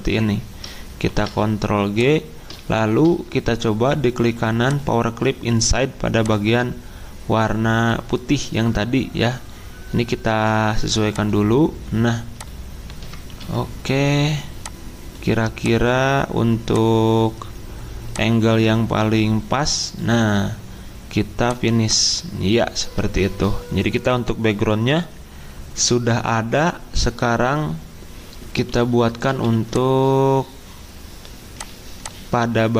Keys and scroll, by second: 1.0 ctrl+g, 13.3 p, 29.3 z.